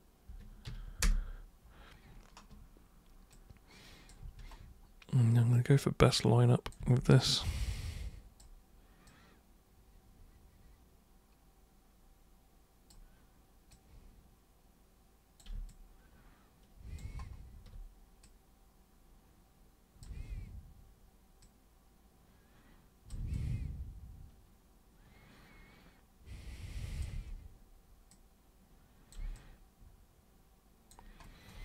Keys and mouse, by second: 1.0 super+Return, 3.3-4.1 drag, 4.2 e, 5.5-6.7 drag, 6.8 w, 7.7-8.3 drag, 9.1-12.9 super+drag, 13.7-15.4 super+drag, 15.6-16.9 alt+drag, 18.2-20.0 drag, 20.2 c, 21.4-23.1 drag, 23.3-27.0 alt+super+drag, 27.1 super+w, 28.1 super+click, 29.3-30.9 alt+super+drag.